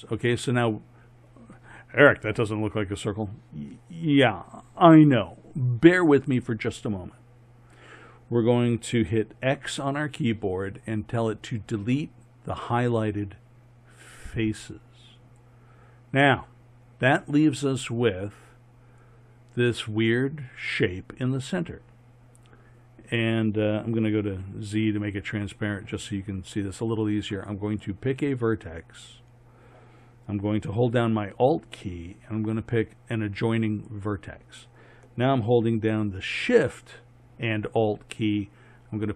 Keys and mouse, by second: 9.5 x, 24.2 z, 27.7 right click.